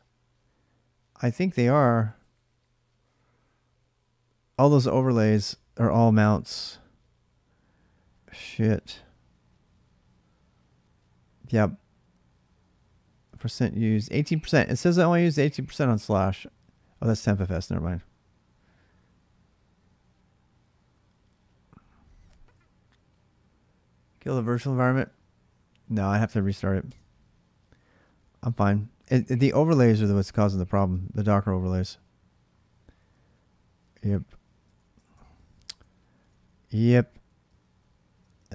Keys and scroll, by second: 1.4-2.3 typing, 26.7 space, 30.7 space, 35.1-37.4 typing.